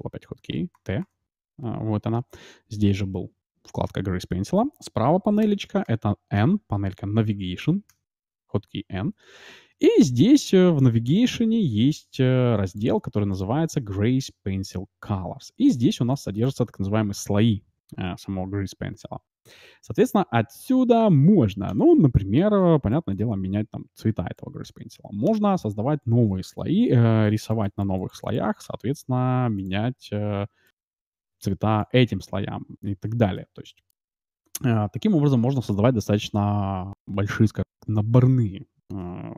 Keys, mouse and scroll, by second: 0.4 t, 0.7 t, 1.0 t, 1.5 t, 5.4-8.4 typing, 12.6-15.1 drag, 16.1-17.8 drag, 21.7-23.4 drag, 25.2-27.1 drag, 27.1-28.5 d, 27.2-31.4 drag, 32.2-35.2 middle drag.